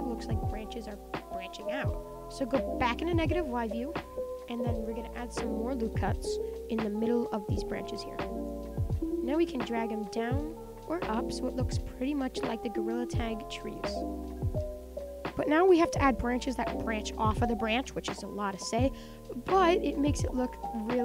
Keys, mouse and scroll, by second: 0.9 Tab, 1.6 click, 2.1 middle click, 2.9 click, 3.6 click, 3.8 Tab, 4.3 click, 5.9 click, 6.9 click, 7.2 click, 7.5 click, 8.8 click, 9.1 middle click, 9.7 click, 10.4 click, 11.0 click, 12.1 click, 12.6 click, 13.3 click, 13.8 click, 14.1 Tab, 14.2-17.0 middle drag, 17.0 KP_1, 17.9-20.0 middle drag, 20.0 Tab.